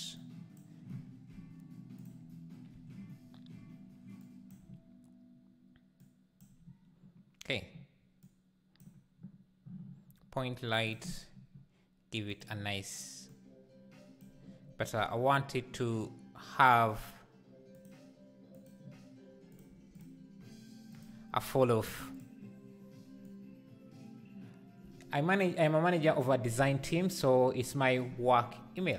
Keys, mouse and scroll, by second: 0.6-2.1 drag, 4.2 click, 6.0 click, 8.3 click, 11.1 click, 13.3 click, 17.7 click, 19.9 click, 22.1 click, 23.4-27.1 drag.